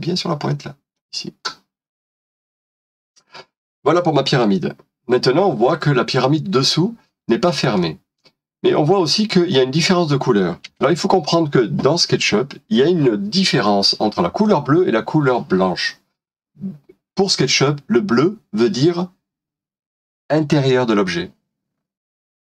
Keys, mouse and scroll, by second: 3.6 scroll down 1, 4.5 middle click, 10.8 space.